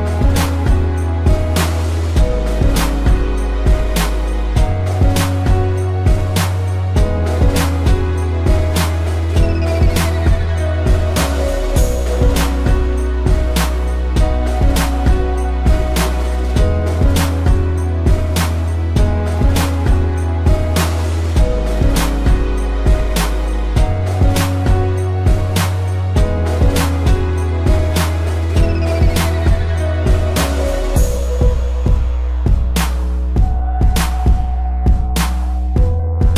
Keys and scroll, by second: 4.9 space, 5.5 p, 7.0 ctrl+z, 15.8 a, 18.8 space, 19.3 ctrl+=, 19.4 space, 19.8 p, 23.9 space, 24.3 ctrl+=, 24.6 space, 28.8 ctrl+z, 31.8 ctrl+-, 32.8 z, 34.3 p, 35.6 ctrl+z, 35.8 ctrl+z.